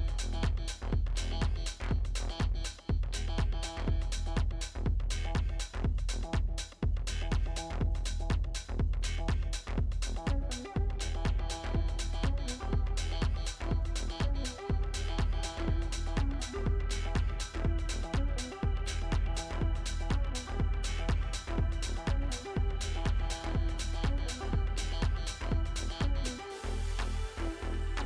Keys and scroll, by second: 1.9 Delete, 9.2 ctrl+space, 24.0 ctrl+g, 27.7 ctrl+space.